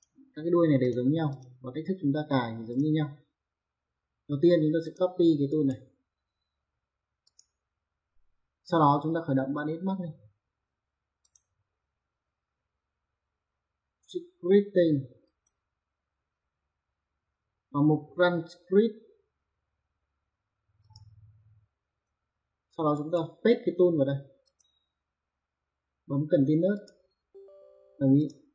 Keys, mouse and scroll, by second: 2.7 click, 4.8 click, 5.5 right click, 7.2 click, 11.2 click, 15.2 click, 20.8 click, 22.9 right click, 24.5 click, 26.7 click, 27.3 click, 27.8 click.